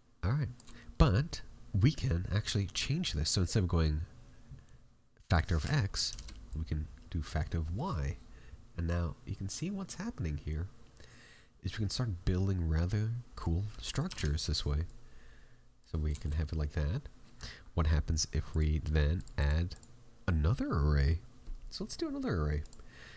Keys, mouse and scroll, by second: 5.5 click, 7.5 middle click, 8.8 click, 13.8 click, 16.1 shift+middle click, 18.4 click, 19.1 click.